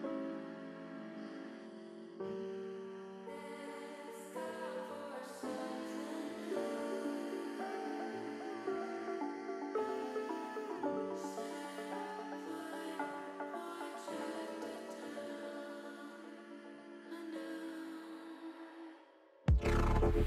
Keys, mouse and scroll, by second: 2.0 s, 3.2 click, 5.6 s, 6.9 z, 9.3 click, 10.6 middle click, 12.9 KP_3, 14.0 click, 15.6-16.9 drag, 17.3 click, 18.3 Delete, 19.4 KP_1.